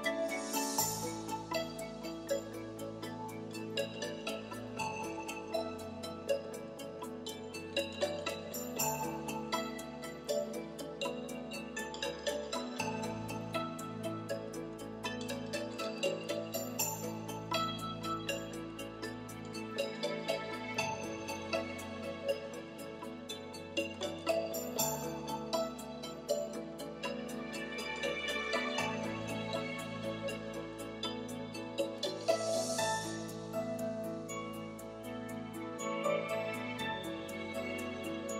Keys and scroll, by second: 17.9 3, 19.5 i, 33.6 shift+3, 34.1 3.